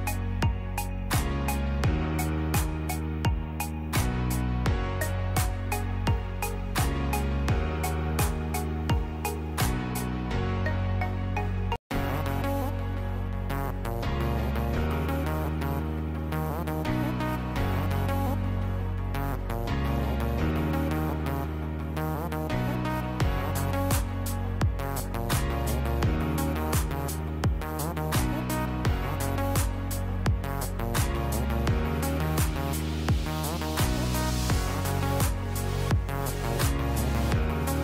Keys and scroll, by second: 0.7 space, 4.1 space, 7.8 space, 11.2 space, 14.5 r, 22.0 shift+Page_Down, 35.2 KP_2, 35.4 KP_Decimal, 35.7 KP_5.